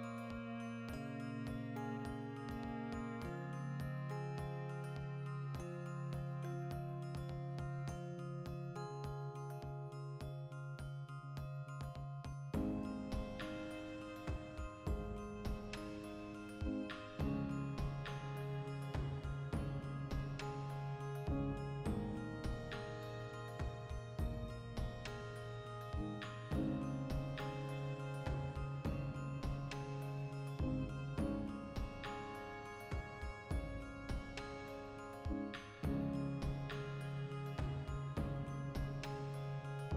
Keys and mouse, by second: 0.8-3.6 middle drag, 3.6 click, 3.8 ctrl+b, 5.0 click, 5.1-6.2 middle drag, 6.0 3, 6.2 right click, 6.6 x, 7.4 2, 7.5 middle click, 7.6-9.1 alt+right drag, 9.1 ctrl+f, 9.6 middle click, 11.0 Tab, 11.3 ctrl+1, 11.9 Tab, 12.1 ctrl+middle click, 12.8-14.5 drag, 14.5 ctrl+r, 15.3 ctrl+z, 15.6 ctrl+r, 16.8 click, 17.0 ctrl+r, 17.7 click, 18.1 ctrl+r, 18.7 click, 18.8 ctrl+r, 19.4 click, 19.6-21.0 middle drag, 19.9 ctrl+r, 21.0 click, 21.4 ctrl+r, 22.2 click, 22.5 ctrl+z, 22.9 ctrl+r, 23.2 right click, 23.3-27.1 ctrl+middle drag, 26.2 ctrl+r, 27.1 click, 27.2 ctrl+r, 28.0 click, 28.0 middle click, 28.4 ctrl+r, 28.7 right click, 28.9-31.7 ctrl+middle drag, 31.7 v, 32.0 right click, 32.4 l, 32.6 x, 33.1-36.6 drag, 36.6-38.4 middle drag, 38.4 alt+right click, 38.9 ctrl+b.